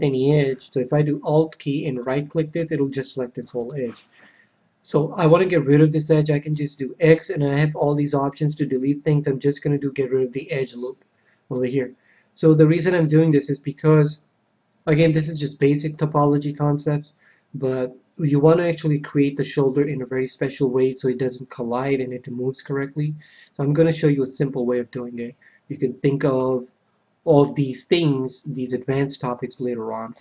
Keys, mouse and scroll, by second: 1.9-3.6 right drag, 2.7-4.3 middle drag, 6.3 x, 11.5 KP_1, 12.8 a, 15.9-17.4 middle drag, 30.1 a.